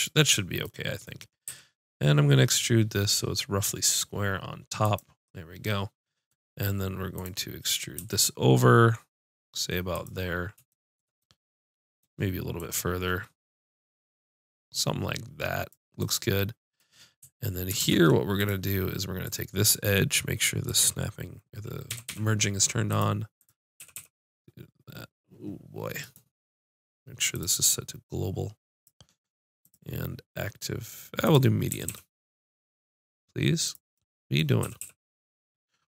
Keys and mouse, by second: 1.5 e, 5.0-6.2 drag, 6.1 right click, 7.2-9.0 drag, 9.0 e, 10.3-12.2 drag, 12.7-15.7 drag, 17.8 ctrl+Tab, 19.2-22.9 drag, 21.9 g, 23.4 click, 23.8 g, 27.3-31.7 drag, 31.7 g, 33.7-35.7 drag, 34.7 g.